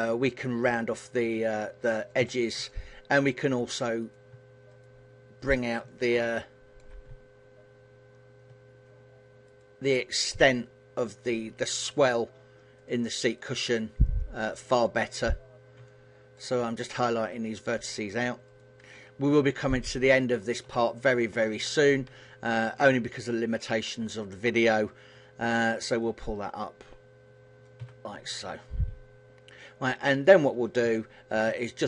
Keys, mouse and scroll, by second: 1.7 click, 1.9 a, 2.3 middle click, 3.7 right click, 4.3 shift+right click, 5.1 shift+right click, 5.5 middle click, 9.1 shift+right click, 9.7 shift+right click, 10.6 shift+right click, 11.6 shift+right click, 12.4 shift+right click, 14.1 shift+right click, 15.5 middle click, 16.5 shift+right click, 17.3 shift+right click, 18.1 shift+right click, 19.1 shift+right click, 19.8 shift+right click, 20.5 middle click, 21.6 KP_1, 22.4 middle click, 24.3 shift+right click, 25.6 click, 27.7 a, 27.9 middle click, 30.5 KP_7, 31.3 shift+middle click.